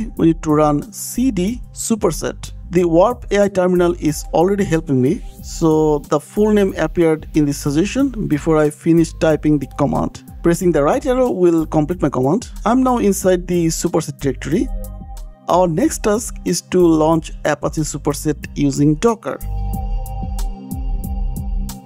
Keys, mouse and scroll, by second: 11.4 Right, 13.5 Return, 14.5 click, 14.6 click, 14.9 click, 15.3-15.7 scroll down 3, 16.6 scroll down 2, 17.0-17.8 scroll up 2, 17.8 scroll down 1, 18.9 click, 21.4 scroll.